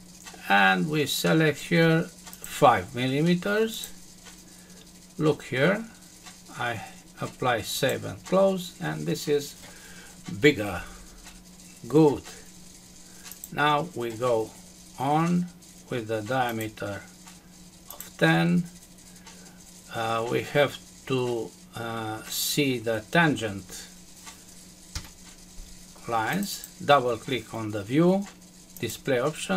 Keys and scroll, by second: 24.9 Escape.